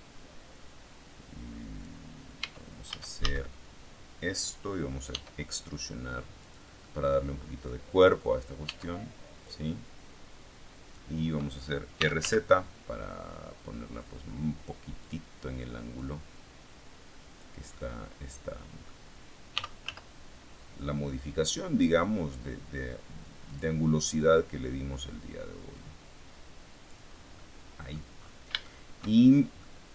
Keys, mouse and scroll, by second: 2.3 Tab, 3.4 a, 5.0 e, 6.4 click, 6.7-8.5 middle drag, 8.5 Tab, 9.3-11.0 drag, 11.6-12.6 typing, 14.9 click, 15.9-17.5 drag, 17.7-18.9 middle drag, 19.5 r, 19.7 z, 23.4 click, 24.1-27.0 drag, 27.0 scroll down 2, 27.3 middle click, 28.0-28.3 scroll up 2, 28.5 shift+middle click, 29.0 shift+click, 29.5 click.